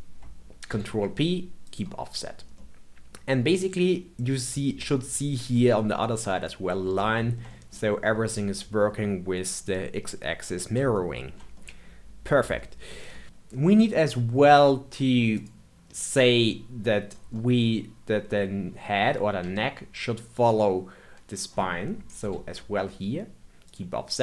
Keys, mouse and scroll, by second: 0.6 ctrl+p, 2.2-2.5 scroll down 1, 2.5-5.5 middle drag, 6.4-13.2 middle drag, 13.2-14.0 scroll up 2, 14.0-15.3 scroll down 2, 15.3 click, 17.3-20.3 middle drag, 20.3 shift+click, 22.2 ctrl+p.